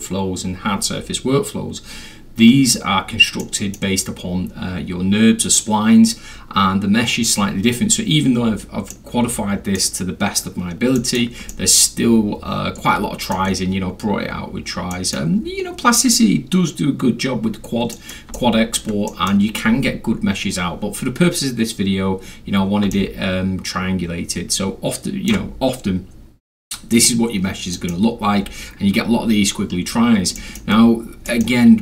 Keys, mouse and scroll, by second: 3.4-3.7 middle drag, 8.9-9.8 middle drag, 11.0 middle click, 11.5-13.3 alt+middle drag, 14.9 middle click, 17.9 middle click, 18.4 alt+middle click, 19.1 alt+middle drag, 22.9-25.3 alt+middle drag, 27.7 middle drag, 28.0 scroll, 28.1 scroll up 2, 28.3 scroll, 28.4-29.7 scroll up 2, 29.7 scroll, 29.9 scroll down 2, 30.0-30.4 scroll, 30.4 alt+middle click, 30.9 alt+scroll down 2, 31.1-31.4 alt+scroll, 31.3 alt+middle drag.